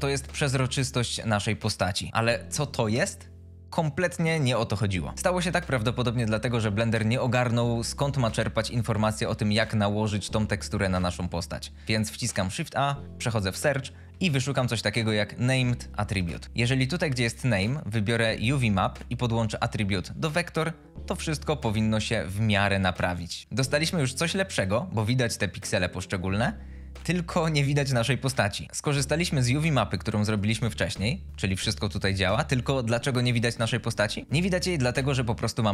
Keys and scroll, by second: 12.6 shift+a, 14.1 Down, 16.0 Return.